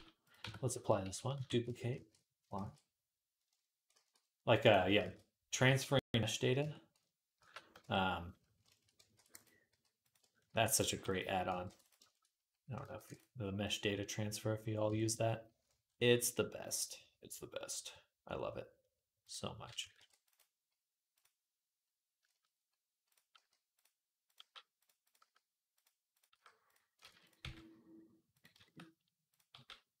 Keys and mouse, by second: 0.2 Tab, 1.2 shift+d, 1.7 ctrl+a, 1.9-5.3 middle drag, 2.4 ctrl+a, 3.7 ctrl+a, 4.4 click, 4.8 ctrl+a, 5.5 ctrl+a, 6.4 Tab, 7.2 ctrl+a, 7.6 Tab, 8.9 ctrl+r, 9.5 g, 10.3 ctrl+r, 10.7 g, 11.3-24.1 ctrl+middle drag, 11.4 ctrl+r, 12.7 ctrl+r, 19.0 click, 19.8 ctrl+r, 22.9 click, 23.1 g, 24.1 click, 24.2 middle click, 24.2 g, 24.8 click, 24.9-30.0 middle drag, 25.0 g, 26.2 g, 26.8 ctrl+z, 27.2 g, 29.3 g.